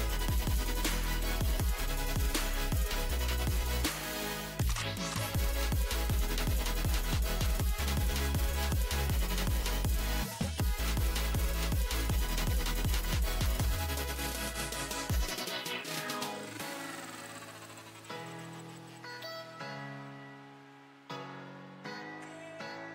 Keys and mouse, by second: 0.8-2.4 drag, 2.4 right click, 4.1-5.1 drag, 4.1-5.1 right drag, 5.7-6.7 drag, 5.7-6.7 right drag, 6.7 e, 7.3 click, 7.3 right click, 11.0 click, 11.0 right click, 15.3 e, 19.0 s, 21.6 z.